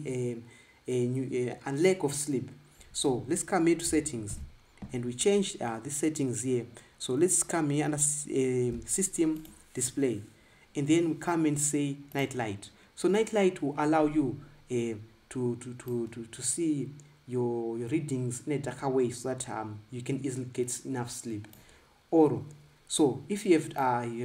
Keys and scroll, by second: 5.1 super+i.